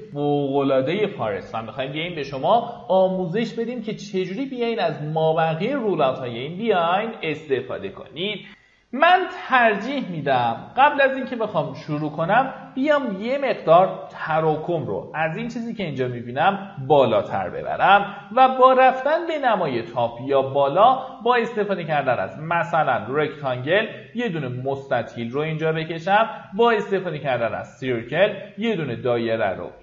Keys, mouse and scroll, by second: 8.8 shift+q, 9.6 click, 12.1 middle click, 12.3-12.7 scroll down 1, 12.8 alt+middle click, 13.5 middle click, 15.1-16.8 drag, 17.3 middle click, 18.7-19.0 scroll up 1, 19.6 ctrl+right click, 21.1 click, 21.6-22.1 scroll down 1, 22.2 middle click, 23.0-24.8 drag, 25.0 middle click, 25.4 scroll up 1, 25.8 ctrl+right click, 26.8-29.8 drag.